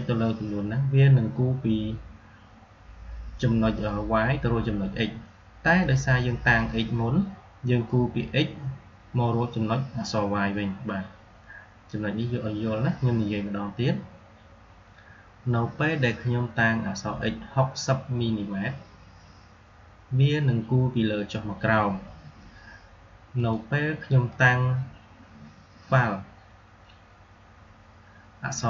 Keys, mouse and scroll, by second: 5.7 click, 23.3 click.